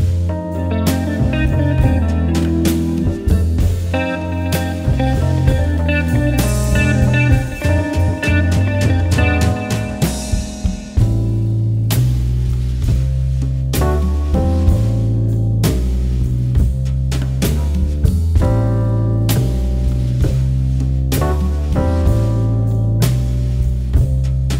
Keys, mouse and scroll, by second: 1.3 click, 3.0 alt+Num_Lock, 3.0 alt+scroll down 1, 3.2 scroll up 1, 3.7-4.1 alt+scroll up 1, 4.1 g, 4.1 shift+click, 4.7 alt+click, 5.0 alt+scroll down 1, 5.1 alt+scroll up 1, 5.3 alt+scroll down 1, 6.1 click, 7.0 v, 7.1 click, 7.2 scroll up 1, 7.3 click, 7.3 space, 7.7 click, 9.3 click, 9.8 Down, 10.6 click, 12.3 Down, 13.3 click, 13.7 space, 14.1 click, 15.0 click, 16.7 click, 17.8 click, 18.5 alt+scroll down 1, 18.7 alt+scroll up 1, 19.1 click, 20.0 alt+Num_Lock, 20.0 alt+scroll up 1, 20.2 scroll down 1, 20.4 alt+scroll up 1, 20.6 alt+scroll down 1, 20.7 alt+scroll up 1, 20.9 scroll down 1, 21.5 click, 21.7-22.7 typing, 22.4 click, 24.3 click.